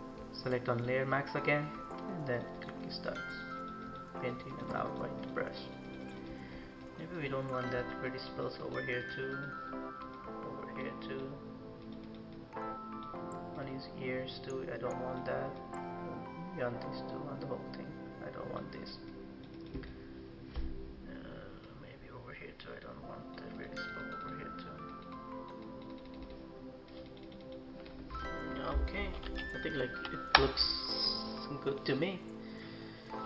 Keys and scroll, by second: 28.8 ctrl+-, 29.2 ctrl+-, 29.7 ctrl+=.